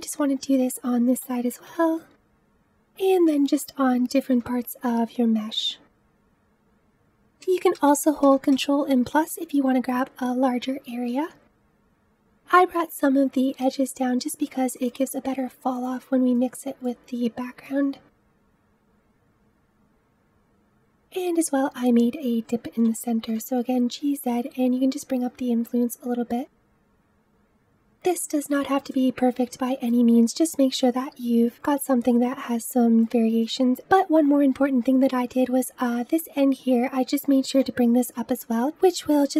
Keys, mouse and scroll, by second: 1.0 g, 3.2 click, 3.4 g, 7.0 click, 7.6 ctrl+KP_Add, 8.1 ctrl+KP_Add, 8.4 ctrl+KP_Add, 11.7 g, 13.6 click, 13.8 g, 17.8 click, 18.2 middle click, 18.5 g, 19.6 click, 20.0 middle click, 20.4 click, 20.5-22.7 middle drag, 22.7 g, 28.5 click, 28.7 g, 29.3 click, 29.5 g, 31.1 click, 31.2 middle click, 31.6 g, 31.9 middle click, 32.2 g, 32.9 click, 33.0 scroll down 2, 33.2-37.8 middle drag, 37.8 g.